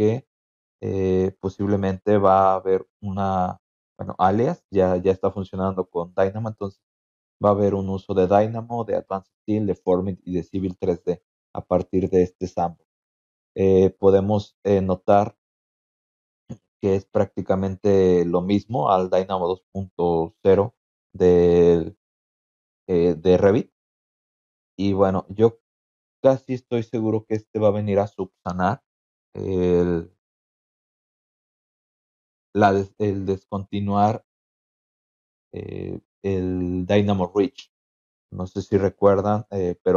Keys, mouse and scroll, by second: 1.6 click, 3.2 click, 5.7 click, 11.0 scroll down 1, 16.1 click, 24.0 click, 39.3 click.